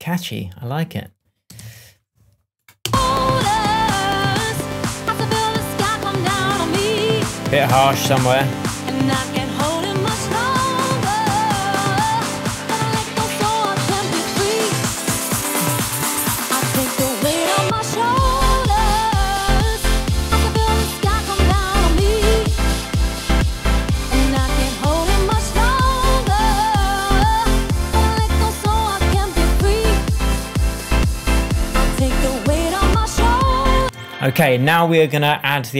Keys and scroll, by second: 1.5 super+s, 2.8 space, 33.7 space.